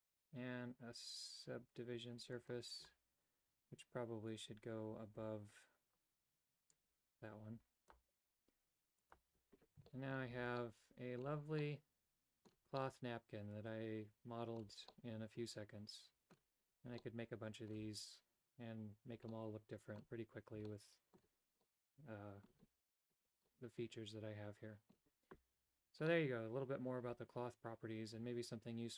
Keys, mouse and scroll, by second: 6.7-7.9 drag, 8.0 typing, 9.0 click, 9.8 shift+middle click, 10.3 a, 10.5 middle click, 11.5 middle click, 12.7-14.6 middle drag, 14.9-16.3 middle drag, 17.0 middle click, 19.3 middle click, 20.7 shift+middle click, 21.6 middle click, 23.5-24.9 middle drag, 26.0-28.9 middle drag.